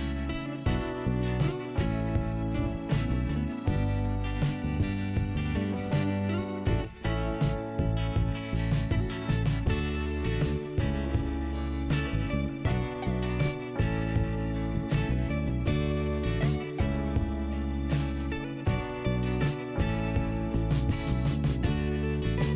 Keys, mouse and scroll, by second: 0.4 scroll down 1, 1.3 click, 3.0-3.4 scroll up 1, 3.7 click, 3.7 click, 4.3 scroll up 1, 5.3 click, 9.4 scroll down 1, 10.5 click, 11.9 click, 14.3 click, 22.1 click, 22.2 click.